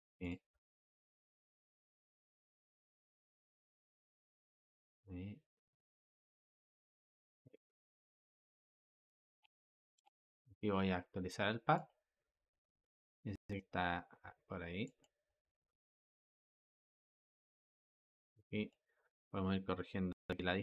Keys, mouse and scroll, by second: 0.4 g, 3.7 click, 4.0 g, 6.7 click, 7.3 g, 9.3 space, 9.9 space, 11.7-18.5 drag.